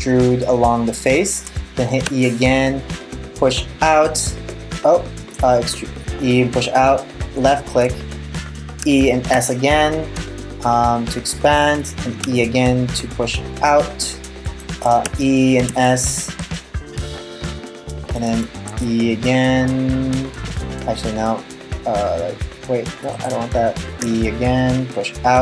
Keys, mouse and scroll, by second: 1.7 e, 5.0 e, 8.4 e, 11.9 e, 14.7 e, 17.9 e, 23.6 e.